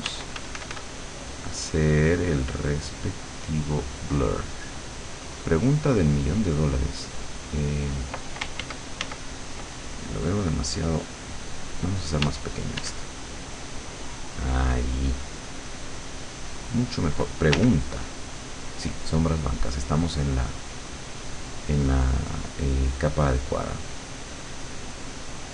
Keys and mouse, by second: 0.1 d, 0.4 f, 0.8-4.4 drag, 8.7 ctrl+z, 12.3 d, 13.3-17.2 drag, 17.6 l, 21.0 click, 22.3-25.5 drag.